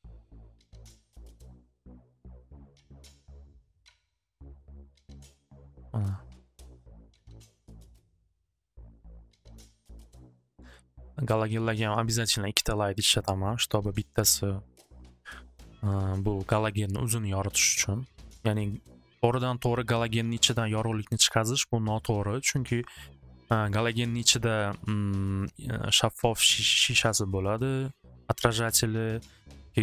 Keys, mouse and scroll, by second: 0.3 click, 0.7 click, 1.2 middle click, 1.6 click, 2.7 click, 3.2 click, 3.7 click, 4.4 click, 5.8 click, 6.9 click, 7.3 click, 7.8 middle click, 9.1 click, 10.2 click, 11.2 middle click, 13.8 middle click, 14.9 scroll, 16.4-17.5 middle drag, 18.0 click, 19.5 click, 19.8 click, 23.8 middle click, 25.5-27.6 middle drag.